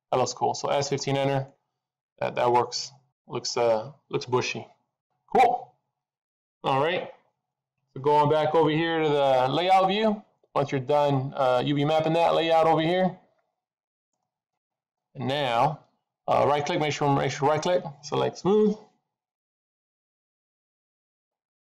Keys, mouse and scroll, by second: 0.0 middle click, 1.0-1.5 scroll down 3, 1.4 middle click, 12.3 click, 12.8 middle click, 16.2 right click.